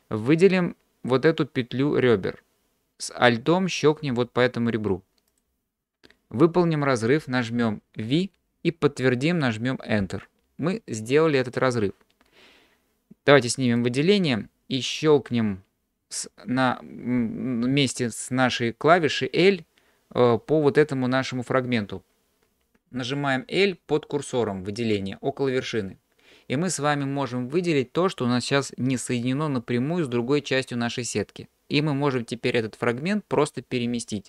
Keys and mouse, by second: 8.1 v, 25.7 l.